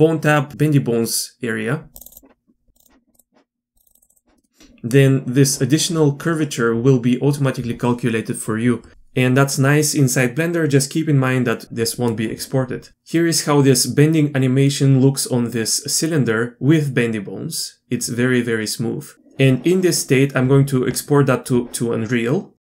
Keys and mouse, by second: 2.0 click, 2.8-3.1 drag, 3.8 click, 11.9-12.3 middle drag, 12.9-19.1 drag.